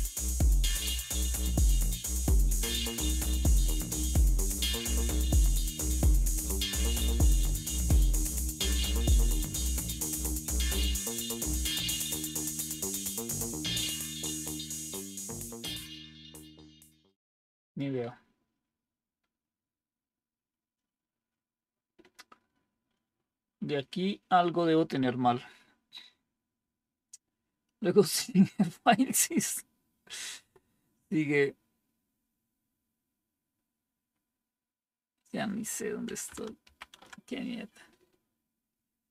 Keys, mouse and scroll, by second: 0.6 Down, 10.0 Down, 10.3 Down, 11.2 Down, 11.6 Down, 12.1 Down, 12.4 Down, 12.6 Down, 13.1 Down, 13.4 Down, 13.7 Down, 14.0 Down, 14.8 Down, 15.1 Down, 15.6 Down, 36.5 ctrl+-.